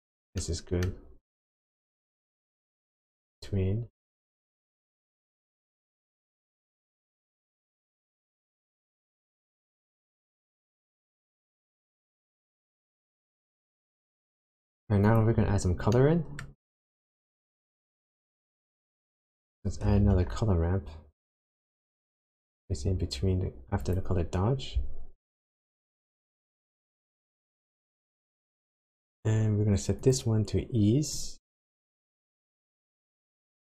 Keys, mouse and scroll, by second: 0.4 middle click, 1.0 scroll up 1, 1.5 click, 2.3 click, 3.8-4.4 scroll down 6, 5.2 click, 6.6 click, 8.0 click, 9.6 click, 15.0 click, 15.5-16.1 scroll up 3, 16.0 middle click, 16.5 scroll up 1, 17.3 click, 18.6 click, 19.5 click, 20.0 shift+a, 30.0 click.